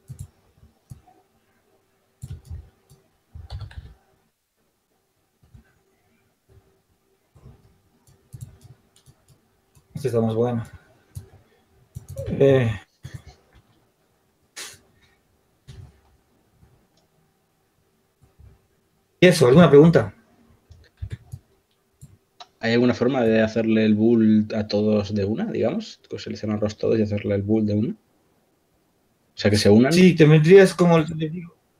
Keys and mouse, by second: 1.9 s, 6.9 s, 12.8 ctrl+z, 15.6 b, 19.3 h, 21.0 b, 23.1-24.5 drag, 26.9-28.0 drag, 28.1-29.8 drag, 30.6-31.7 drag.